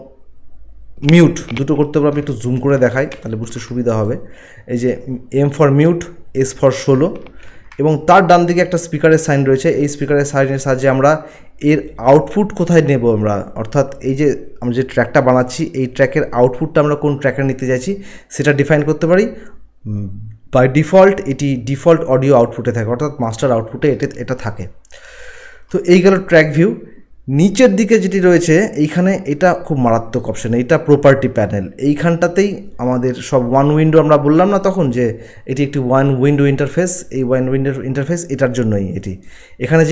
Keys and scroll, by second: 2.9 ctrl+1, 3.1 ctrl+1, 7.2 ctrl+1.